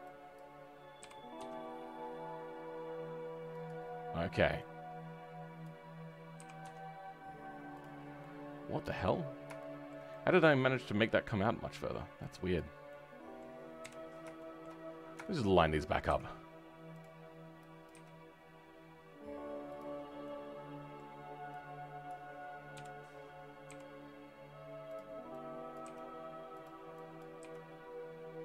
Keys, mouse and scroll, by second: 0.3 click, 1.0 g, 7.9 scroll down 2, 8.1 right click, 8.1 middle click, 8.7 right click, 9.2 scroll up 1, 9.5 right click, 9.5 shift+middle click, 12.5 click, 12.8 middle click, 13.7 KP_1, 14.3 shift+middle click, 14.7-15.1 scroll up 7, 15.1 shift+middle click, 16.0 g, 19.8-20.2 scroll down 6, 20.2-22.0 middle drag, 22.0 click, 22.7 KP_3, 23.0-23.6 scroll up 2, 23.6 g.